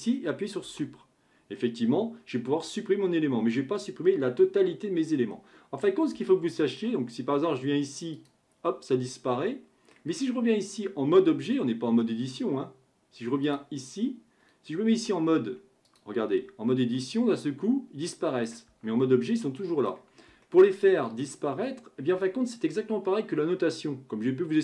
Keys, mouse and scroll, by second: 0.6 Delete, 5.1-6.3 scroll down 2, 6.3-8.2 shift+middle drag, 8.2 click, 9.1-12.1 middle drag, 13.5-14.9 drag, 14.9 Tab, 15.9 click, 16.3 Tab, 17.0-18.7 middle drag, 18.7 Tab, 19.3-23.6 middle drag.